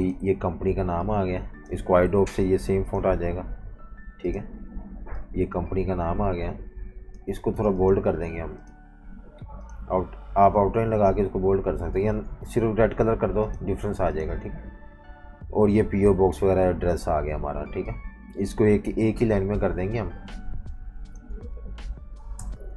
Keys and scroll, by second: 2.0 i, 3.9 v, 7.5 v, 7.6 space, 12.0 super+z, 20.3 i, 21.5 v, 22.4 shift+super+].